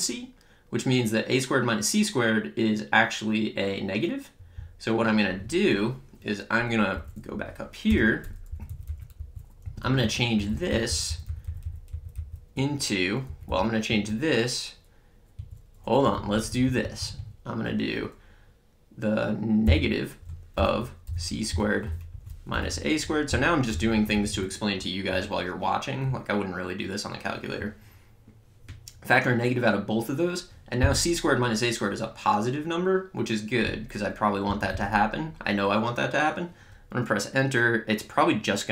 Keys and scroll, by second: 6.9 Up, 7.9 Return, 8.5 Left, 9.1 Down, 9.6 Right, 13.2 Left, 13.8 Right, 19.6-23.7 typing, 23.9 Right.